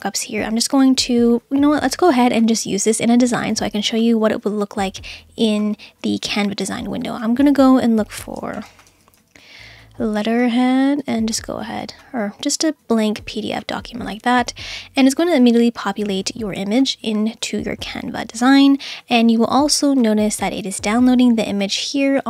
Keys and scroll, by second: 8.3-9.8 typing.